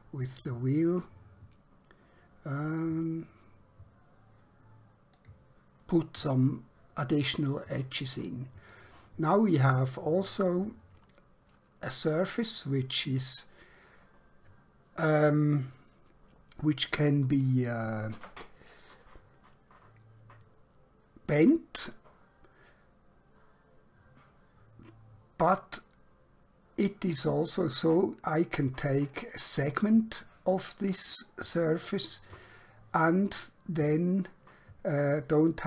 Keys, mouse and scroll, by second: 5.1 click, 5.9 right click, 8.8 click, 20.9-21.4 scroll down 1, 21.4 scroll up 1.